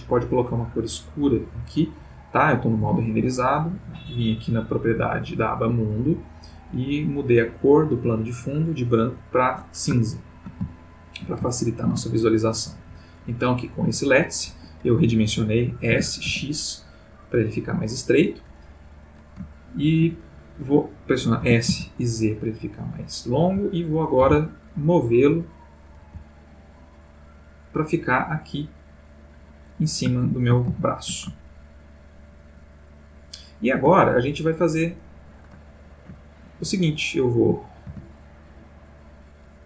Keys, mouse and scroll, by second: 10.1-10.6 ctrl+middle drag, 10.7-12.1 ctrl+shift+middle drag, 12.8 g, 14.5 Escape, 15.9 s, 16.2 x, 17.6 click, 19.5-20.1 ctrl+middle drag, 21.4 s, 21.7 z, 22.8 click, 23.4 g, 23.9 click, 24.2 r, 25.4 click, 26.0 g, 29.2 click, 30.3 ctrl+middle click, 30.8-31.4 ctrl+shift+middle drag, 31.5-34.1 ctrl+shift+middle drag, 35.6 middle click, 37.3 click, 38.8 click.